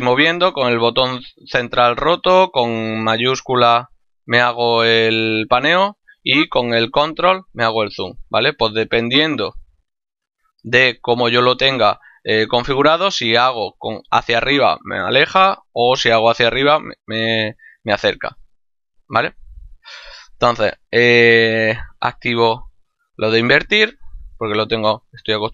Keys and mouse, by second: 0.5 middle click, 2.5 shift+middle click, 5.6 middle click, 18.6 click, 21.2 click, 22.1 middle click, 24.8 middle click.